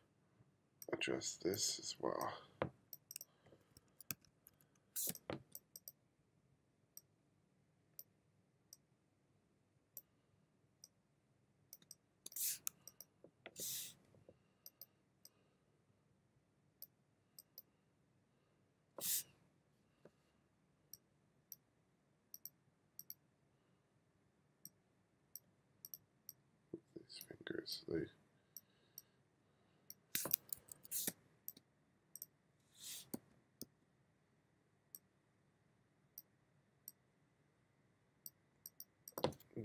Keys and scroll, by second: 3.7 1, 4.2 2, 5.1 space, 11.9 space, 30.7 1, 31.1 space, 33.2 b.